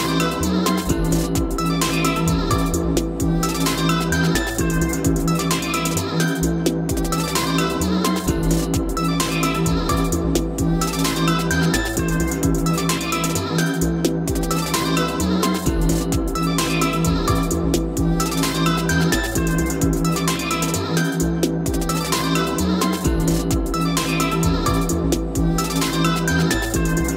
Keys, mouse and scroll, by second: 13.0-13.5 scroll up 4, 15.1 click, 15.8 scroll, 15.8 scroll down 2, 18.0 click, 19.5 click, 20.6 scroll, 21.3 click, 21.7 click, 22.4 click, 23.2 d, 23.8 Escape, 24.1 Escape, 24.2 Escape, 24.4 Escape, 24.5 Escape, 24.6 Escape, 25.0 click, 26.1 Escape, 26.5 click.